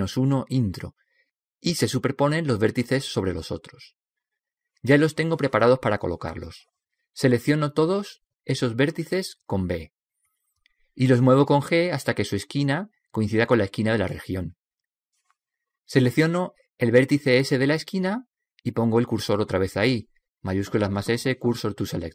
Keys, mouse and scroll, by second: 8.9 b, 14.6 g, 19.2 right click, 20.4 shift+s.